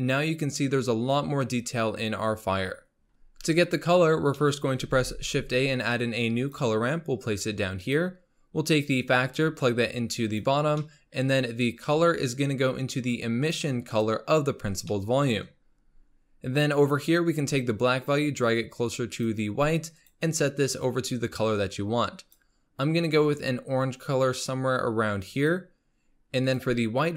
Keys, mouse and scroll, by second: 3.6-4.4 scroll down 9, 4.4-4.9 middle drag, 4.9 shift+a, 8.8 click, 10.9-11.9 middle drag, 11.9 click, 14.9 middle click, 15.7-16.2 scroll up 3, 17.7-20.1 drag, 26.4-27.1 drag.